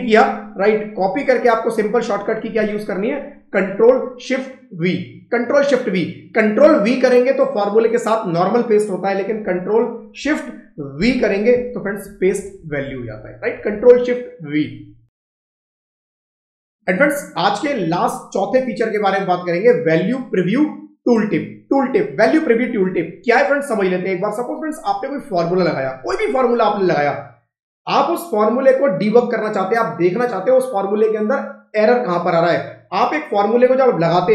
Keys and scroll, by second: 10.8 ctrl+shift+v, 11.9 Down, 13.3 Up, 14.1 Down, 34.0 F2.